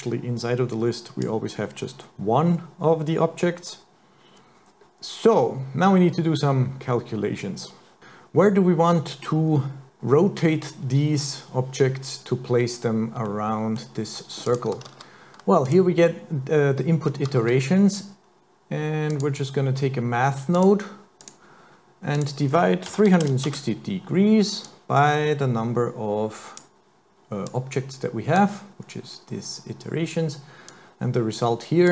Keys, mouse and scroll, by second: 13.3 middle click, 14.5 click, 14.9 shift+a, 15.7 click, 17.6 shift+a, 22.2 click, 24.7 click, 27.5 click, 30.7 click.